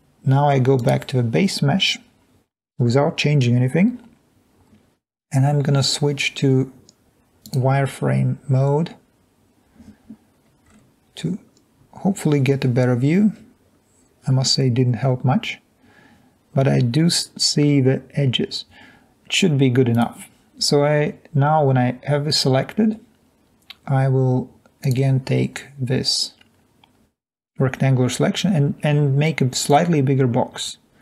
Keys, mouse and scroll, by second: 10.3-10.7 scroll up 2, 10.7-12.0 scroll down 2, 12.1-12.8 scroll down 2, 13.3 middle click, 13.3-14.3 scroll up 2.